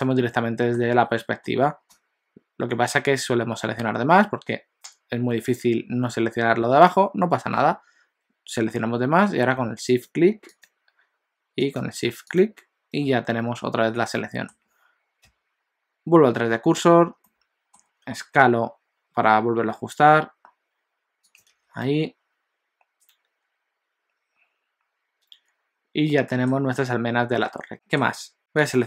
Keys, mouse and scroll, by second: 0.9 alt+a, 1.2 middle click, 1.9 click, 10.0 shift+click, 10.7 shift+click, 11.8 shift+click, 12.3 shift+click, 14.2 middle click, 15.3 ., 17.3 middle click, 17.9 scroll down 1, 18.1 s, 21.5 alt+a, 21.9 middle click, 27.7 middle click, 27.7 KP_1, 28.4 alt+a, 28.4 KP_1, 28.6 click.